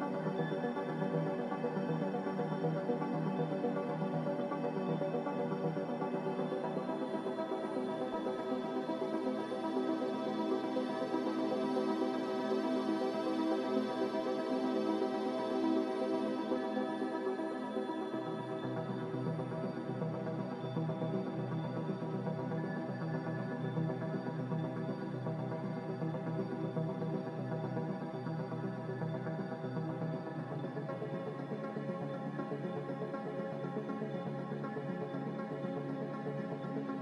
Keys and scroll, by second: 3.3 z, 13.5 g, 15.3-16.1 typing, 20.1 Escape, 20.2 Escape, 23.6 ctrl+c, 24.1 ctrl+v, 27.1 Escape, 31.5-32.3 typing, 35.7 a.